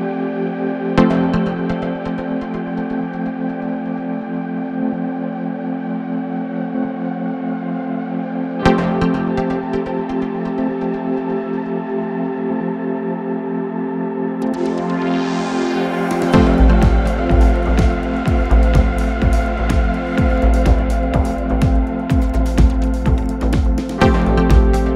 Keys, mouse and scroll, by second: 0.9 f, 1.2-1.5 scroll up 2, 1.5 shift+click, 1.9 middle click, 2.2 f, 2.4 f, 2.5 middle click, 2.7 f, 2.8 middle click, 3.1-4.0 scroll down 1, 4.0 shift+r, 4.5 Escape, 4.7 click, 5.3 ctrl+r, 6.3 middle click, 7.1 click, 8.5 shift+click, 8.9 middle click, 9.3-10.3 drag, 10.4-11.8 shift+drag, 12.1-13.3 drag, 13.3 middle click, 13.6 click, 14.2 middle click, 14.7 click, 15.2 middle click, 15.7 ctrl+click, 15.9 middle click, 16.3 click, 16.8 middle click, 17.1 scroll up 8, 17.4 middle click, 17.9 click, 18.2 Tab, 18.6-19.4 middle drag, 19.4 scroll down 7, 19.7 Tab, 20.0 middle click, 20.2 scroll down 3, 20.3 middle click, 20.9 click, 21.4-21.9 scroll up 4, 21.4 middle click, 21.9 scroll down 4, 22.2 middle click, 22.4 shift+click, 22.9 middle click, 23.5 shift+click, 23.6 shift+middle click, 24.4 s.